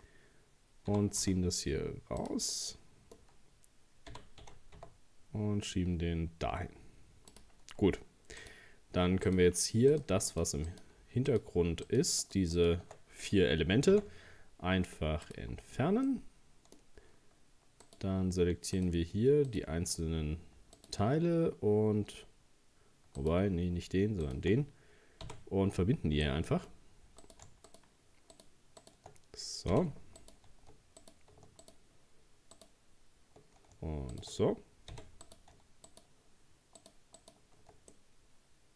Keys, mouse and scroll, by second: 0.1 scroll down 1, 0.9 g, 2.5-4.1 middle drag, 4.1 g, 7.6 scroll up 1, 8.4 right click, 9.3 shift+right click, 9.9 shift+right click, 10.3 shift+right click, 10.7 shift+right click, 11.3 shift+right click, 11.9 shift+right click, 12.2 shift+right click, 12.6 shift+right click, 13.9 x, 16.1-17.8 middle drag, 17.8 right click, 18.8 shift+right click, 19.5 shift+right click, 20.8 shift+right click, 23.2 shift+right click, 24.2 shift+right click, 25.3 f, 26.2-27.2 middle drag, 27.2 right click, 27.7 shift+right click, 28.3 shift+right click, 28.8 shift+right click, 29.7 f, 30.2 right click, 31.0 right click, 31.6 shift+right click, 32.6 shift+right click, 34.1 shift+right click, 34.9 f, 35.2 right click, 35.9 shift+right click, 36.8 shift+right click, 37.2 shift+right click, 37.9-38.7 middle drag.